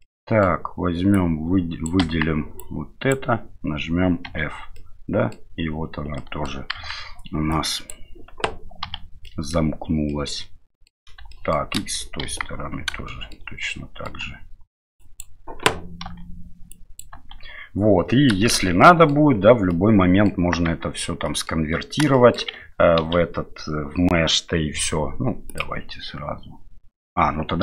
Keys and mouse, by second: 0.1 middle click, 1.1 click, 2.0 KP_1, 2.6 click, 4.3 f, 4.7 middle click, 6.2 middle click, 6.7 KP_1, 7.5 click, 8.8 f, 9.2 middle click, 10.1 middle click, 11.3 shift+middle click, 12.2 KP_1, 13.1 shift+middle click, 13.7 shift+middle click, 15.1 click, 16.1 f, 16.7 click, 17.1 f, 18.1 middle click, 18.5 shift+z, 18.8 middle click, 19.7 middle click, 20.7 Tab, 21.2 middle drag, 22.1 shift+middle drag, 23.0 ctrl+j, 25.5-27.2 drag.